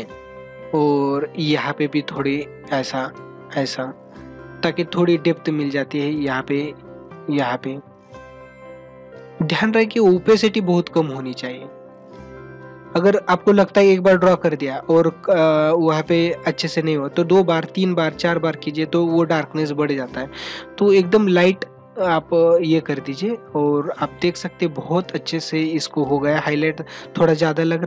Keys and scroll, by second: 0.3 space, 7.9 ctrl+alt+z, 9.6 ctrl+alt+z, 12.7 ctrl+alt+z, 19.5 ctrl+alt+z, 24.1 ctrl+=.